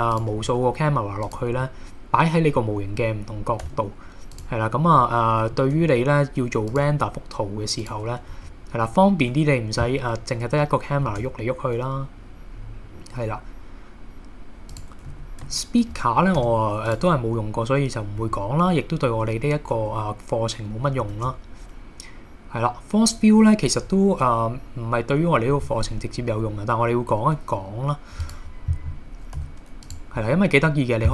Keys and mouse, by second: 0.1 click, 0.4 r, 1.3 click, 1.6-2.3 middle drag, 2.6-3.0 middle drag, 3.6 g, 4.3 click, 5.0 middle click, 5.8 r, 6.7 click, 6.9 g, 7.9 click, 8.3 KP_1, 11.1 shift+a, 14.7 click, 15.1 a, 16.4 x, 21.1 shift+a, 29.4 s, 29.8 click.